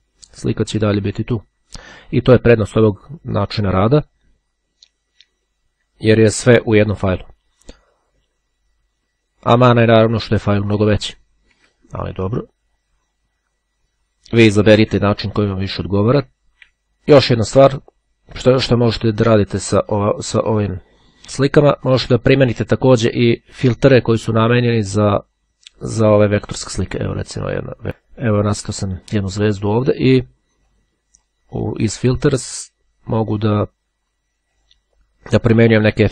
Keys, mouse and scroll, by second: 12.2-12.9 ctrl+scroll up 1, 13.1-13.6 ctrl+scroll down 1, 15.1-16.4 ctrl+scroll down 2, 16.6-18.3 drag, 19.2 click, 25.8 click, 26.6-27.8 drag, 30.3 click, 34.4 click.